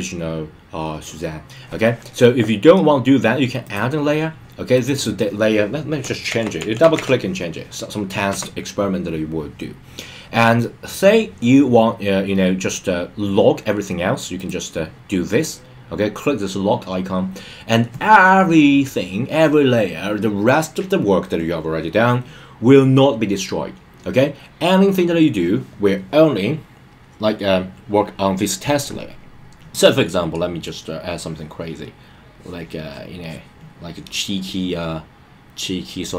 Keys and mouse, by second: 3.6 click, 4.7 click, 5.0-8.3 drag, 14.3 click, 30.6-31.8 drag, 32.3 click, 32.8 click, 33.2 click.